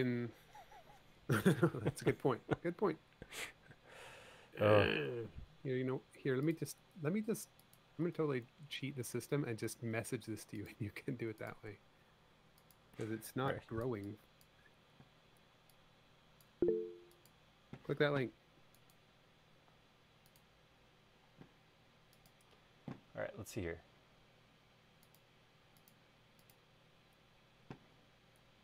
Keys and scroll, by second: 4.9 l, 10.0 a, 13.5 e.